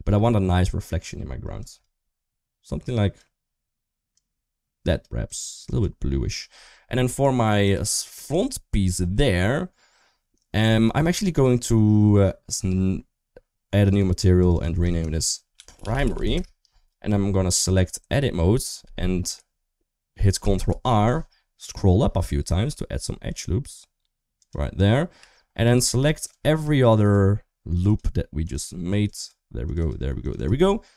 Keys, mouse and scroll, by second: 7.4 click, 11.0 shift+middle click, 13.7 click, 14.1 click, 14.3-16.1 drag, 17.4 Tab, 17.6 middle click, 18.9 middle click, 20.3 ctrl+r, 25.4 3, 25.9 click, 26.1 click, 26.6 shift+click, 26.8 shift+click, 27.5 shift+click, 27.7 shift+click, 28.2 shift+click, 28.4 shift+click, 28.8 shift+click, 28.9 shift+click, 29.4 shift+click, 29.5 shift+click, 30.0 shift+click, 30.1 shift+click.